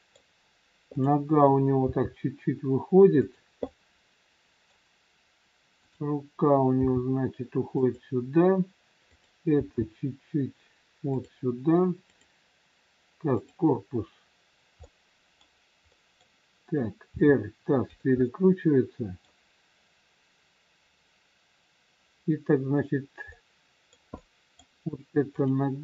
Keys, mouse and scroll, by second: 0.9 click, 1.9 g, 3.6 middle click, 5.8 click, 6.8 g, 9.0 click, 9.9 g, 12.0 click, 13.4 click, 14.8 middle click, 16.4 middle click, 17.1 r, 18.1 middle click, 18.1 scroll up 1, 21.5-23.2 scroll down 1, 23.2 middle click, 24.5 middle click, 25.2 click.